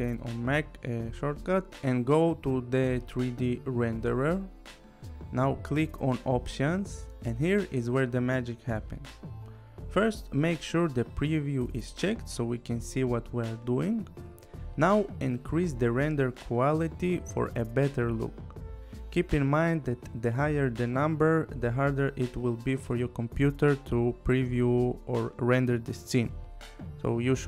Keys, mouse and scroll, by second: 0.8 click, 2.8 click, 6.6 click, 8.3 click, 14.8 click.